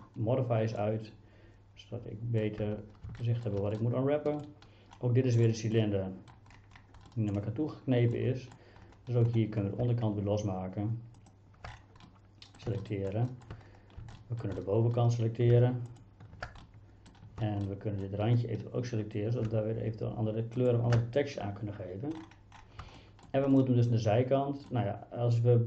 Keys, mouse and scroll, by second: 0.8-2.4 middle drag, 2.6 Tab, 3.2 middle click, 3.8 middle click, 5.4 middle click, 5.8 middle click, 7.1 middle click, 8.2 middle click, 11.2 alt+click, 12.1 middle click, 12.8 shift+middle click, 13.3 shift+middle click, 14.2 shift+middle click, 14.6 middle click, 16.7 shift+middle click, 17.7 middle click, 20.7-22.8 alt+shift+drag, 23.0 shift+middle click, 23.6-24.7 middle drag.